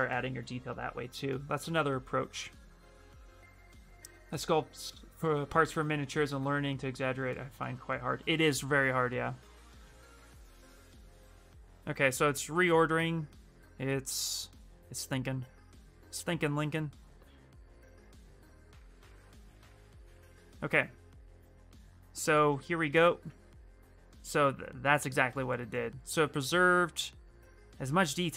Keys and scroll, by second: 22.6 shift+f.